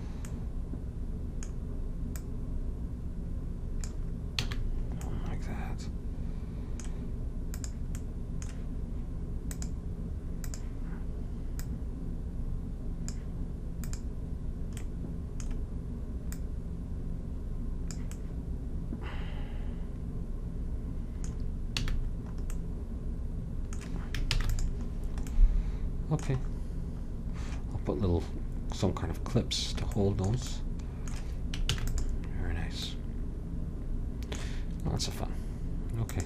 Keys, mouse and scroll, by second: 0.4 middle click, 2.3-4.2 drag, 4.6 a, 4.7-6.5 middle drag, 7.7-13.6 drag, 14.0-18.3 drag, 18.3-19.5 middle drag, 22.0 a, 24.5 ctrl+s, 31.8 ctrl+s.